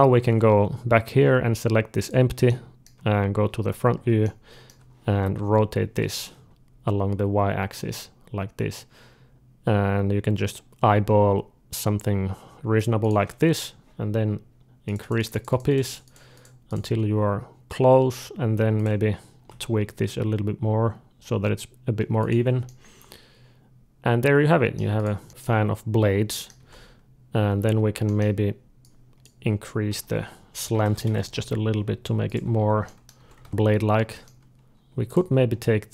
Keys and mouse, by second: 1.9-3.9 drag, 2.8 d, 3.9-6.1 middle drag, 5.3 r, 13.3-18.6 drag, 19.3-20.6 drag, 19.3 r, 22.5-24.6 middle drag, 24.8 click, 25.3-27.3 middle drag, 26.4 Tab, 27.4 z, 27.9 middle click, 28.7-30.7 drag, 29.7 d, 30.7 g, 32.4 z, 32.7 middle click, 33.1 Tab, 33.3 alt+a, 34.1 middle click, 34.9-35.9 drag.